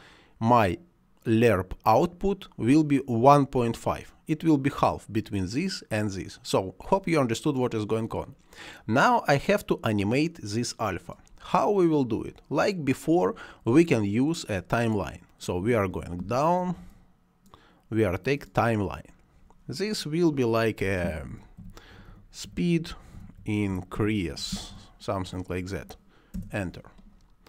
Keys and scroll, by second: 21.2-24.6 typing, 26.2 Return.